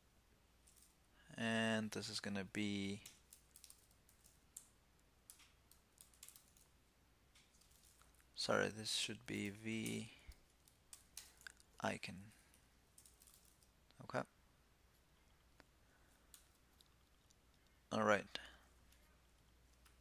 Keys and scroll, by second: 7.7 super+z, 8.4 alt+Left, 16.0 super+s.